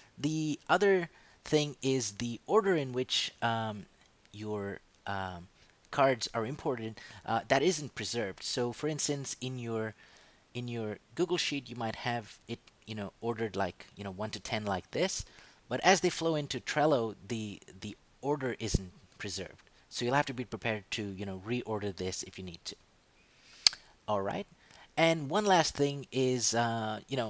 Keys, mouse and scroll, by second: 9.4 click, 11.5 click, 16.0 click, 21.4 click, 22.8 click, 25.1 click.